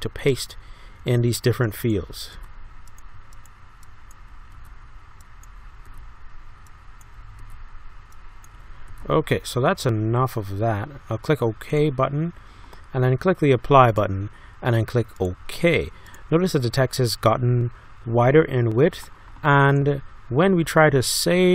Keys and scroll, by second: 1.0 ctrl+v, 4.5 ctrl+v, 5.9 ctrl+v, 7.4 ctrl+v, 8.9 ctrl+v.